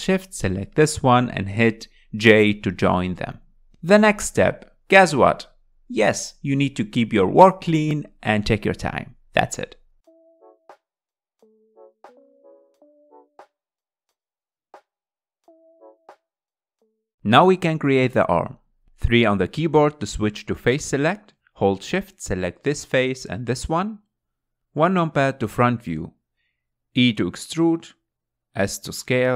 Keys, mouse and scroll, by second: 0.4 click, 1.5 shift+click, 4.2 j, 5.3 scroll down 3, 5.6 middle click, 6.2-6.6 scroll up 3, 7.0 click, 7.1 middle click, 7.6 click, 8.0 click, 8.2 middle click, 8.4 click, 9.3 scroll down 2, 9.3 middle click, 9.7-14.7 typing, 9.9 scroll up 2, 10.1 click, 10.7 click, 11.3 click, 12.0 click, 12.3 click, 12.9 click, 13.3 click, 14.2 click, 14.6 click, 14.9 scroll down 3, 15.0 middle click, 16.1 KP_1, 16.2 scroll up 3, 16.4 click, 16.7 g, 17.0 scroll down 2, 17.1-19.2 middle drag, 19.2 scroll down 2, 19.4 middle click, 20.1 scroll up 2, 21.7 3, 22.9 click, 23.7 shift+click, 25.4 KP_1, 26.1 scroll down 2, 26.6-28.2 shift+middle drag, 28.2 e.